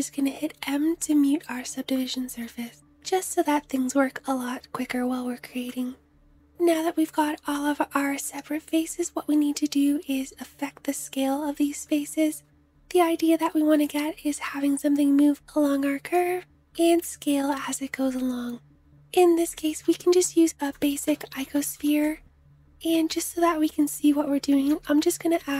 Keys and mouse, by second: 2.0-5.4 drag, 5.4-19.1 middle drag, 19.3 shift+a, 21.2-22.8 middle drag, 22.8-25.5 drag, 24.2 shift+a.